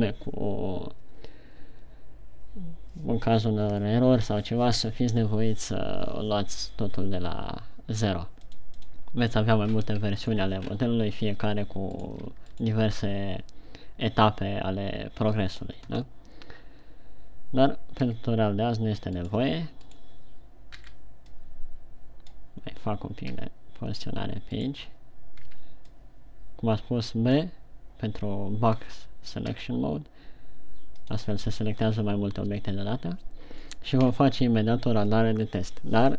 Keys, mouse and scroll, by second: 9.2 click, 10.7-11.0 shift+scroll down 5, 11.1-12.4 scroll up 3, 12.6 right click, 13.2 shift+right click, 18.5 g, 19.9 right click, 20.3 right click, 21.1 b, 23.7 g, 25.2 right click, 25.9 b, 30.0 g, 31.7 click, 34.1-34.4 scroll down 1, 34.4 a.